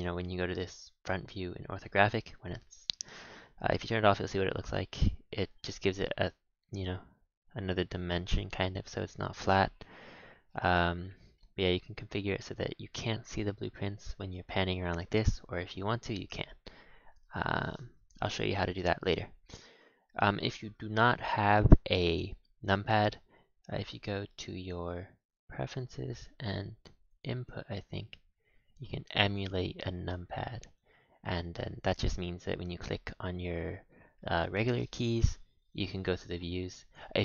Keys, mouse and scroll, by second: 0.5-3.6 shift+middle drag, 3.8 KP_5, 5.9-7.8 middle drag, 7.8 KP_1, 9.2-9.6 scroll up 3, 9.6 shift+middle click, 10.2-10.5 scroll up 1, 10.5 middle click, 11.0-11.3 scroll down 4, 11.3 middle click, 11.7-13.2 scroll down 5, 14.3-17.4 middle drag, 21.7-24.9 drag, 36.8 click, 37.1 Tab.